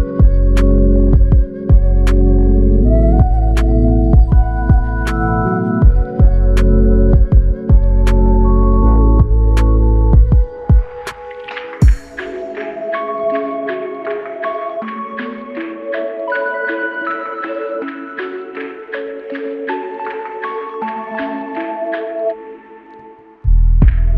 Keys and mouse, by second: 0.4 double click, 2.5 alt+click, 3.6 double click, 4.0 alt+click, 5.0 double click, 7.0 alt+click, 7.9 double click, 9.7 alt+click, 10.9 alt+click, 14.2 shift+click, 16.6 shift+click, 17.5 shift+click, 18.7 double click, 20.9 ctrl+click, 22.3 shift+click, 22.7 shift+double click, 23.1 alt+click.